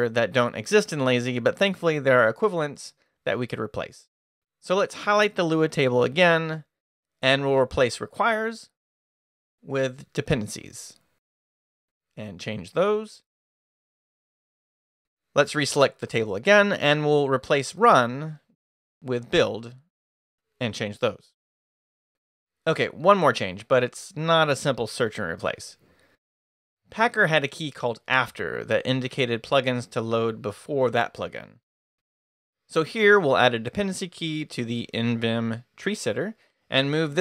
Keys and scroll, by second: 4.4-6.0 typing, 7.0 o, 8.5-12.4 typing, 14.6-21.5 typing, 27.3-29.3 typing, 29.5 Return, 30.4-36.0 typing, 36.3 Left, 36.4 Return, 37.0 Return.